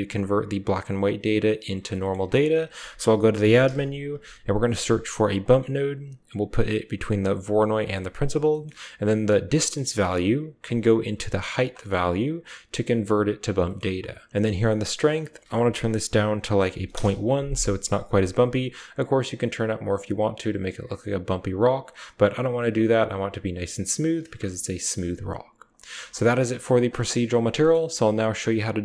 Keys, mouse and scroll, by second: 2.3 shift+a, 5.9 typing, 7.7-8.6 typing, 8.0 click, 8.4 click, 9.5 click, 10.6-11.1 drag, 11.1-11.7 typing, 11.7 click, 11.9 middle click, 12.2 click, 14.5 typing, 15.0-16.8 drag, 18.3 middle click, 18.7-20.3 drag, 21.7 click, 23.5 middle drag, 24.2 shift+middle click, 25.7 click, 26.2-28.7 typing, 26.6 click, 27.0 click, 27.4 click.